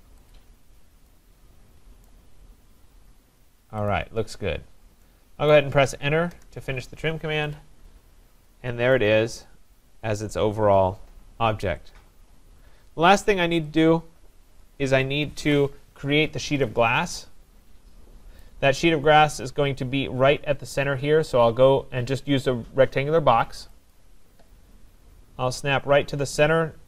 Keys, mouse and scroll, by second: 0.3 click, 2.0 right click, 2.3-3.9 scroll, 3.9 click, 4.4-5.0 scroll, 5.5 right click, 6.3 Return, 7.6 click, 7.6-7.9 scroll down 5, 8.0-8.6 scroll, 8.9 right click, 9.2-11.3 scroll, 12.9 scroll, 14.6 click, 15.5 Delete, 18.4 right click, 18.7-19.1 scroll, 24.0 click.